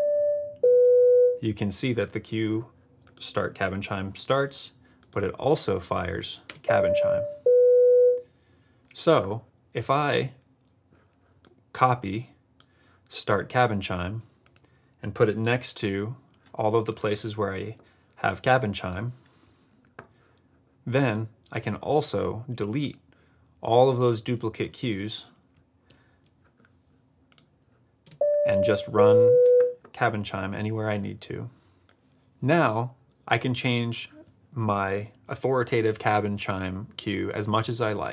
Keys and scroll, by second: 6.4 space, 15.5 super+v, 17.7 super+v, 19.4 super+v, 25.8 super+BackSpace, 28.0 space.